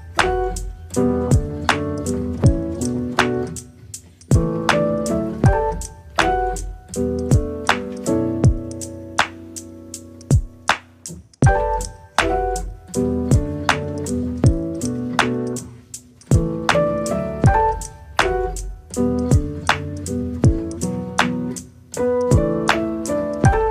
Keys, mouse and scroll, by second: 0.4 click, 10.2 click, 11.3 click, 12.3 click.